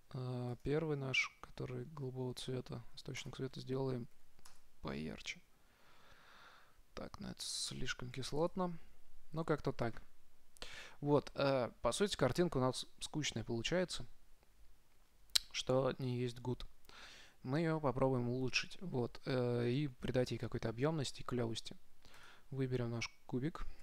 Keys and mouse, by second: 1.2-2.5 drag, 3.6-5.6 drag, 8.8 click, 22.5-23.8 right drag.